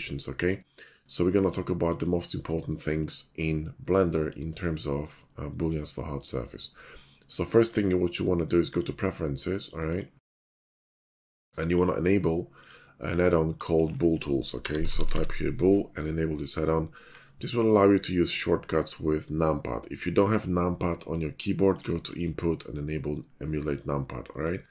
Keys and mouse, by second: 0.0-1.9 middle drag, 5.2-7.7 middle drag, 7.7-10.9 drag.